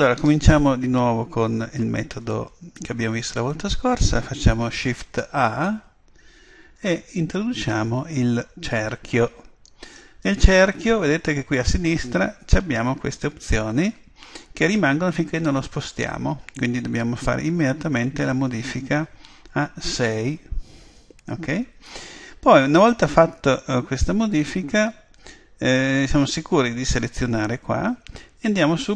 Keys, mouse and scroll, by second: 0.2-2.9 middle drag, 3.2 middle click, 5.6 shift+a, 18.7 click.